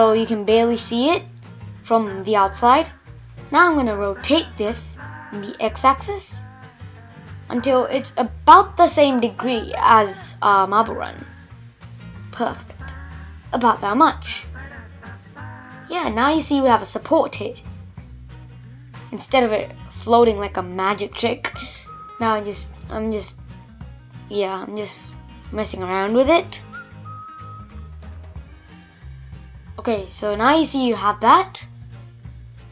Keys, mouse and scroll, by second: 0.0-1.0 scroll down 2, 1.0 r, 7.3 scroll down 1, 7.4-8.6 middle drag, 8.6-8.9 scroll up 1, 8.9 g, 12.2-14.7 middle drag, 14.7-15.1 scroll down 3, 15.1-18.3 middle drag, 18.3 r, 20.5-22.8 middle drag, 22.8 g, 24.6 scroll up 2, 24.9 middle click, 25.8 Tab, 25.9-26.8 middle drag, 26.8 click, 27.1-27.5 scroll down 5, 27.5-30.6 middle drag, 30.7 scroll up 1, 31.0-32.7 middle drag.